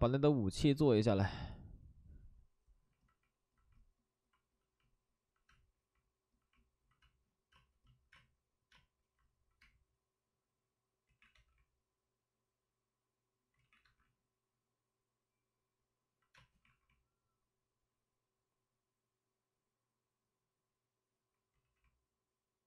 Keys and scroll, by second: 5.4 space, 7.5 space, 8.1 space, 8.7 space, 9.6 space, 11.0 ctrl+z, 11.3 2, 13.5 ctrl+z, 13.8 1, 16.6 alt+s, 16.6 space, 21.5 ctrl+z.